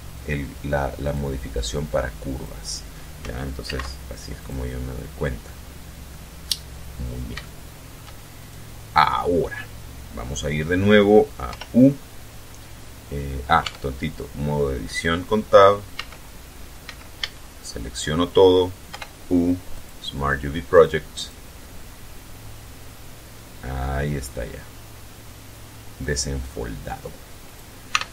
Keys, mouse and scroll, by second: 0.8 click, 2.0 click, 3.4 alt+c, 4.1 click, 5.2 middle click, 6.1-6.5 scroll up 2, 6.7 scroll down 2, 7.1 shift+middle click, 8.1 shift+right click, 11.2 u, 13.3 Tab, 15.6 z, 16.5 z, 16.9 a, 18.6 u, 19.5 click, 20.4 click, 20.9 click, 25.7-27.4 drag, 27.6 t.